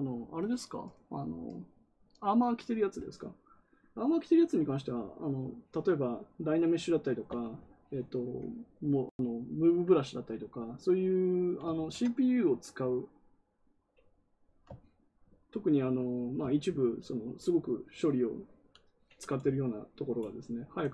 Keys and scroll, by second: 11.6 ctrl+z.